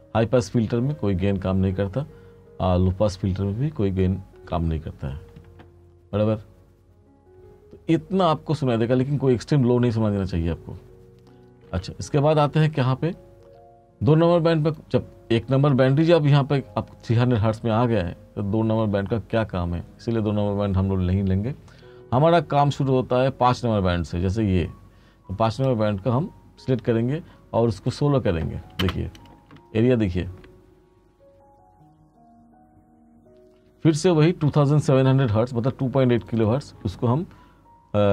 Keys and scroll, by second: 11.7 space, 28.9 space, 34.1 space.